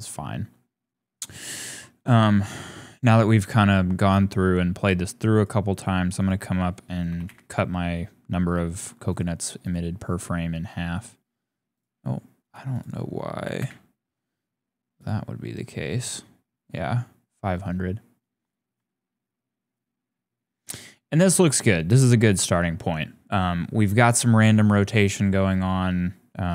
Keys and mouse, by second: 0.4 shift+middle click, 5.3 middle click, 6.1-7.2 drag, 9.1 click, 11.7-13.6 drag, 14.9 click, 15.9 click.